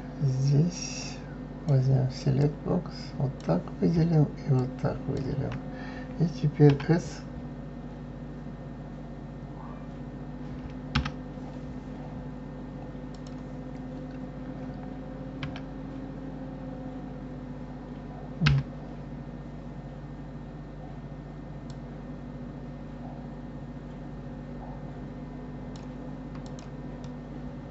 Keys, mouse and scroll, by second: 0.7-2.5 drag, 4.5 shift+click, 6.7 s, 13.1 click, 15.4 s, 21.7-24.7 drag, 26.4 click, 27.1-27.7 middle drag.